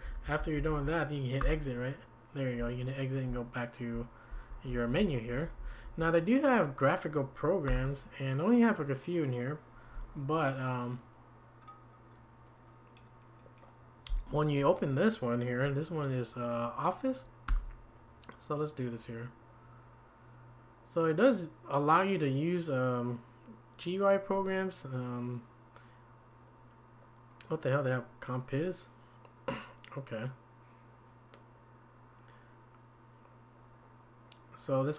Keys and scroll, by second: 0.0-1.2 typing, 1.4 Return, 3.3 Down, 3.8 Down, 3.8 Down, 4.3 Down, 4.7 Up, 5.0 Up, 5.3 Down, 5.6 Down, 5.9 Up, 7.7 Return, 17.5 Return.